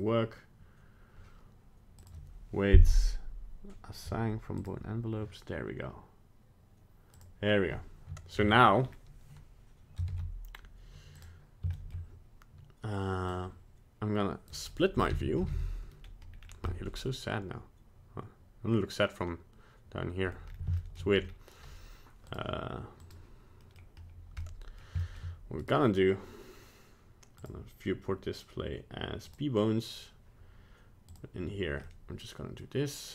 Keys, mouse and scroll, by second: 2.0 click, 7.2 click, 8.3-8.7 scroll down 3, 8.8-9.1 scroll up 2, 10.1 ctrl+Tab, 11.7 shift+middle click, 13.3 click, 14.9 t, 15.3 n, 15.4 t, 15.5 n, 16.0-16.3 scroll up 1, 16.3 scroll down 3, 16.7 middle click, 20.3 middle click, 20.5 scroll up 2, 20.8 shift+middle click, 20.8 shift+scroll down 1, 21.3 scroll up 1, 22.4 click, 23.1 click, 23.6 middle click, 24.4 middle click, 24.6 middle click, 24.7 middle click, 25.1 shift+middle click, 25.2 shift+middle click, 25.6 right click, 27.4 click, 31.1 click, 31.8 middle click.